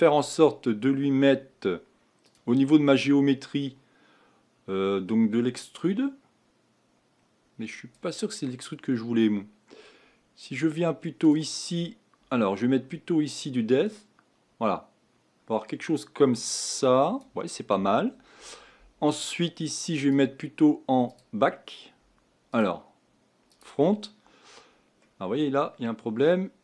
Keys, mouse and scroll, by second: 5.8-25.0 drag, 25.0-26.6 middle drag.